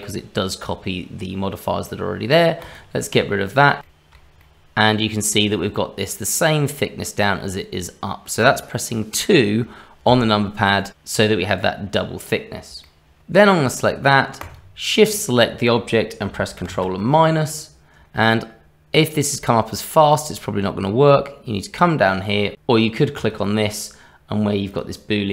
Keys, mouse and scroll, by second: 2.6 click, 4.1 shift+middle click, 4.4 middle click, 8.4 middle click, 12.8 shift+middle click, 14.4 shift+click, 16.6 ctrl+KP_Subtract, 20.1 click, 23.1 click, 24.7 click.